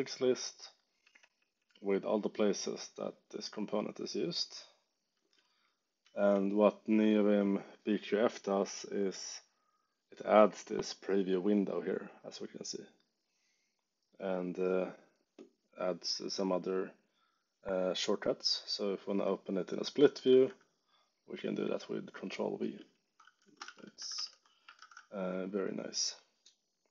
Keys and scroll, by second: 3.2 j, 5.9 k, 20.2 ctrl+v, 21.2 j, 23.3-24.5 typing, 24.7 shift+super+d.